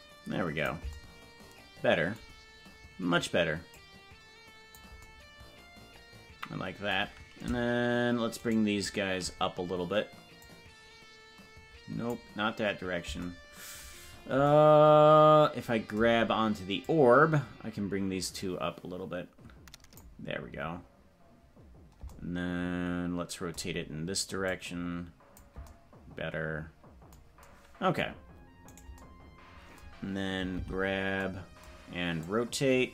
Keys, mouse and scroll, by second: 3.7-4.8 drag, 8.7-9.3 shift+right drag, 10.4-12.2 drag, 17.0 click, 24.4-25.4 drag, 29.2 right click, 30.6 alt+g, 32.2-32.9 drag.